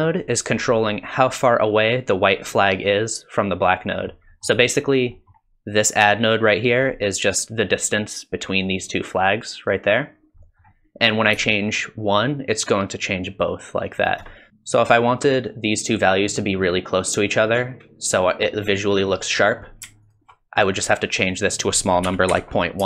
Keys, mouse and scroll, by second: 0.3 middle click, 4.3 middle click, 5.2 middle click, 6.7 middle click, 10.4 middle click, 11.5 shift+click, 14.5 click, 19.4 middle click, 20.0 ctrl+shift+click, 21.1 click.